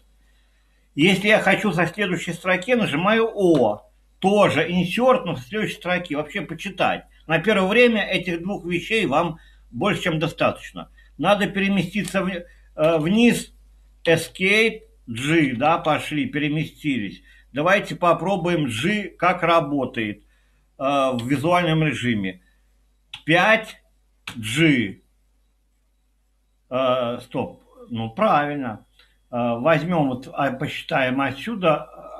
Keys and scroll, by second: 1.1 Escape, 3.5 o, 11.8 j, 11.9 j, 12.8 j, 14.0 Escape, 15.1-16.0 typing, 17.8-18.5 typing, 18.7 Up, 21.2 Escape, 22.9-24.2 typing.